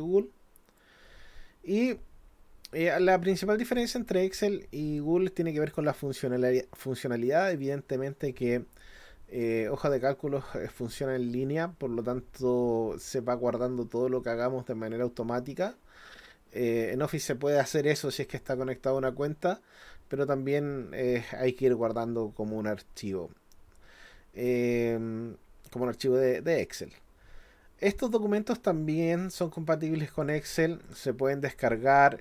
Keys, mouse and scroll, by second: 29.4 click, 30.2 click, 30.9 click.